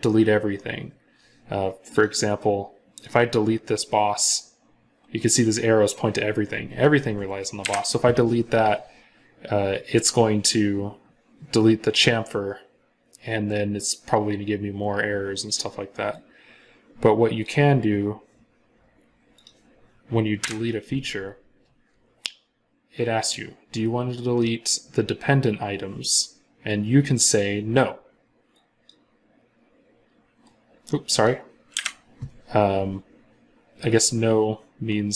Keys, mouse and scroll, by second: 7.5 Delete, 20.2 Delete, 31.6 Delete.